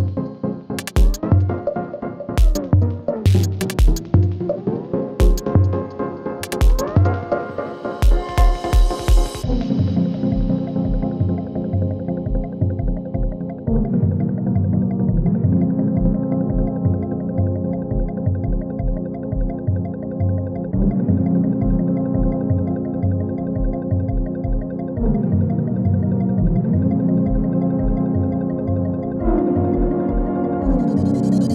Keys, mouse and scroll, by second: 0.2-0.5 click, 0.2 space, 2.7 click, 3.9-4.5 drag, 5.9 r, 8.2 alt+click, 9.4-10.3 typing, 10.5 Return, 11.7-13.1 typing, 13.4 Right, 14.3 shift+=, 15.6-19.0 typing, 20.1 Return, 21.0 click, 22.6 ctrl+d, 24.9 ctrl+d, 26.1 click, 26.4 space, 27.5 click, 27.9 space, 29.6-30.5 drag.